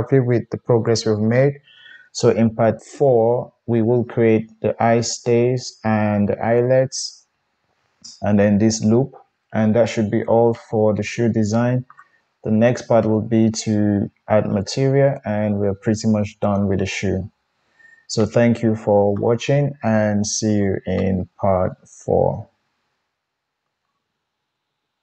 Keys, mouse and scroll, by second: 7.2-25.0 middle drag, 24.5 KP_1.